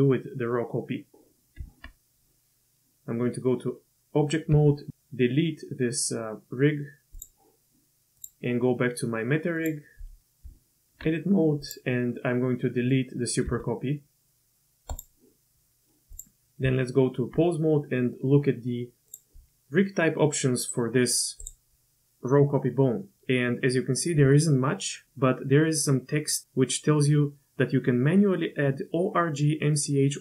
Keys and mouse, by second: 1.6 Tab, 4.5 x, 8.2 click, 9.6 click, 10.4 Tab, 12.2 click, 12.4-12.9 middle drag, 13.4 x, 16.6 Tab, 19.1-19.4 drag.